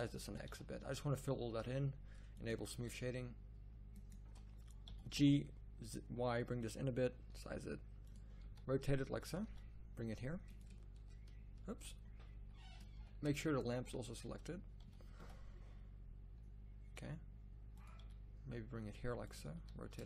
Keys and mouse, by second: 0.2 s, 4.8 g, 7.3 s, 8.4 r, 9.4 g, 11.7 ctrl+z, 12.3 ctrl+z, 12.9 z, 14.0 z, 14.8 g, 17.9 g, 19.5 r.